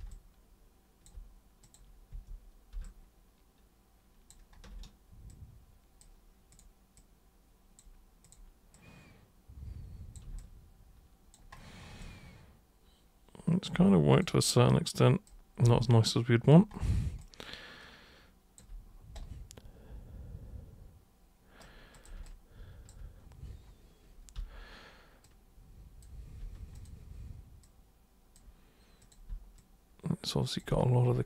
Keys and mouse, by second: 0.1 alt+super+click, 1.6 super+click, 2.1 super+w, 2.9-4.3 alt+super+drag, 5.3 super+click, 6.5 super+click, 6.9 super+click, 8.2 super+click, 8.7-10.1 super+drag, 10.4 alt+super+click, 12.0-13.6 alt+super+drag, 14.1 super+click, 14.7 super+click, 15.8 alt+super+click, 17.2-18.5 alt+super+drag, 19.2-21.6 super+right drag, 21.9 super+click, 22.3 alt+super+click, 24.3 super+v, 25.3-26.0 drag, 26.7 super+click, 27.6 super+click, 29.0 super+click, 29.3 super+v, 29.6-30.6 drag.